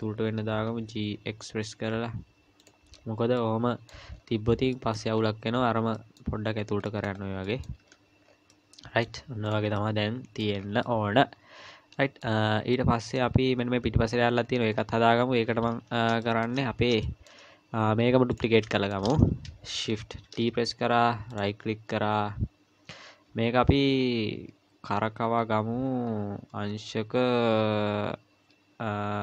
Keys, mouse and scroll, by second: 0.7 g, 2.9-3.7 scroll down 4, 3.4 middle click, 4.1-4.7 scroll down 2, 4.7 middle click, 5.2-5.9 scroll down 2, 5.9 middle click, 6.5-7.7 scroll up 6, 6.9 middle click, 7.5 middle click, 7.8 z, 8.3 scroll down 3, 8.5 middle click, 9.5 click, 9.8 middle click, 10.6 scroll down 3, 10.8 middle click, 12.4 scroll up 2, 12.7 middle click, 13.5 scroll up 1, 15.6 KP_1, 16.2 shift+middle click, 16.6-17.0 scroll up 3, 17.0 shift+middle click, 18.3 click, 18.7 shift+middle click, 19.1 scroll up 2, 20.3 shift+d, 21.6 scroll down 3.